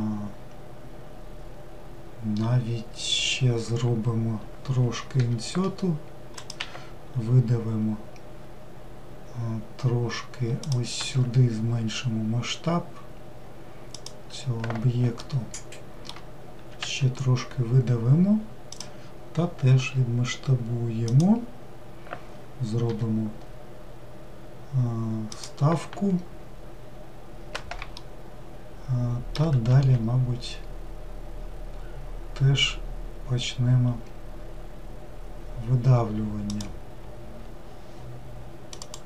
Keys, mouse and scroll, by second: 15.3-17.0 shift+middle drag, 17.0 e, 26.9-28.1 scroll up 1, 28.1-29.9 shift+middle drag, 29.9 e.